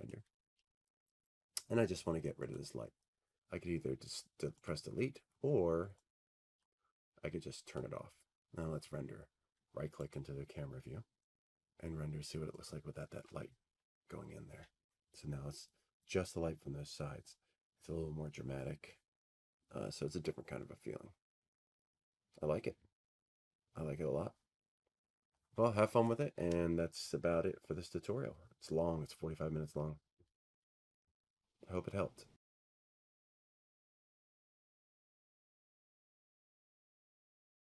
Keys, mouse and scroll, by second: 1.8 typing, 2.8-4.9 middle drag, 3.5 t, 5.8 click, 6.1 middle click, 6.6-7.1 scroll, 8.4 click, 10.3-15.3 drag, 15.8-17.8 right drag, 18.3-20.2 drag, 20.3 click, 20.4 click.